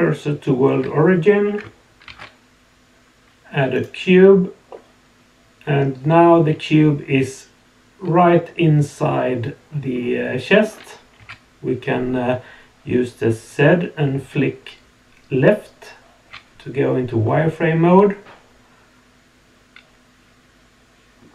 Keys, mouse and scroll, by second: 2.0 shift+a, 4.7-10.6 middle drag, 11.2 z, 17.2-21.2 middle drag.